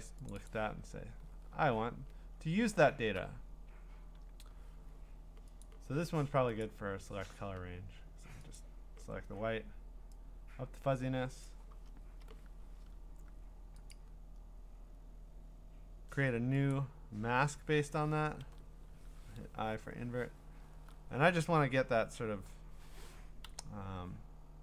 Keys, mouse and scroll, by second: 0.3 click, 0.5 click, 1.4-1.9 scroll, 1.9-2.9 scroll up 16, 2.9-3.2 scroll down 5, 5.7 click, 6.2 scroll, 6.6 click, 8.6 click, 11.4 click, 12.0 Return, 13.9 click, 16.7 click, 18.4 ctrl+i, 19.0 ctrl+d, 23.5-24.3 scroll.